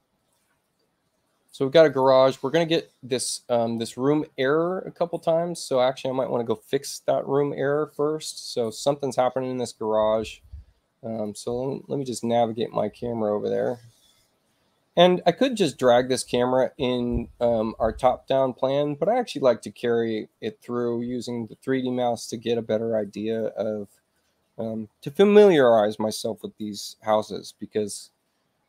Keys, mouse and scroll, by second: 0.9 middle click, 1.8 click, 8.8 space, 11.1 click.